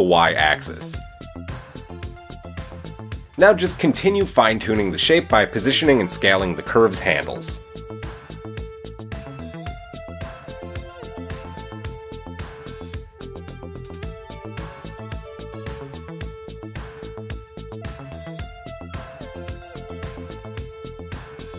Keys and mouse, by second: 2.1 middle click, 2.8 Tab, 3.9 drag, 4.2-4.6 shift+middle drag, 5.9 click, 7.7 click, 8.1 shift+middle drag, 8.4-13.6 shift+middle drag, 13.6 click, 13.8-16.4 middle drag, 18.1 alt+s.